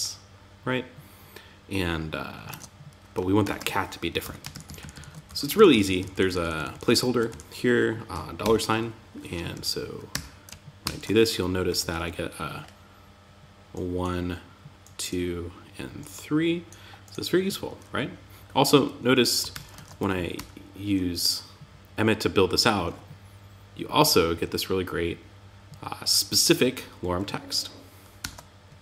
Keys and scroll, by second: 1.8 super+Tab, 2.8 super+z, 3.6 Up, 3.9 alt+Right, 4.6 Up, 4.9 alt+Right, 6.6 Right, 8.9 Down, 9.5 Tab, 10.2 super+s, 11.0 Down, 11.1 Left, 18.9 super+s, 19.1 super+Tab, 19.7 super+r, 27.6 super+r.